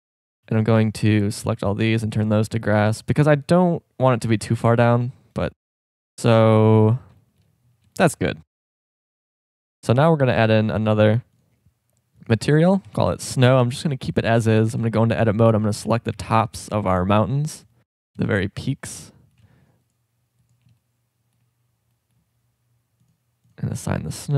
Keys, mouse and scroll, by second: 0.1 a, 0.4 a, 0.7 c, 2.2-3.8 drag, 4.7 Tab, 6.0 KP_0, 11.9 click, 14.6 Tab, 15.9 a, 16.1 c.